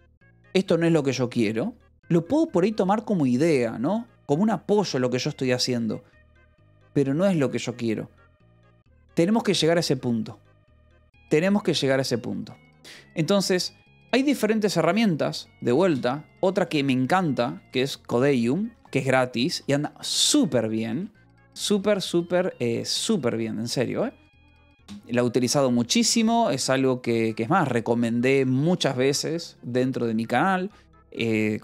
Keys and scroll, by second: 16.8 o, 17.4 BackSpace, 17.6 d, 18.6-22.6 typing, 23.2 Escape, 28.7 Return.